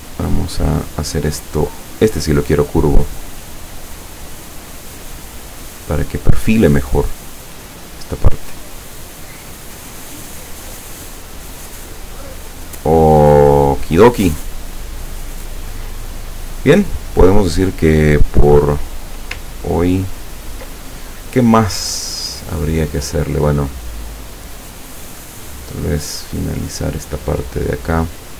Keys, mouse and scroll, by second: 0.0 click, 1.9 click, 4.2-5.4 drag, 5.6-8.7 drag, 9.1 click, 10.3-12.7 drag, 13.8 click, 17.5-19.0 drag, 19.5-20.1 ctrl+scroll down 2, 24.4 click.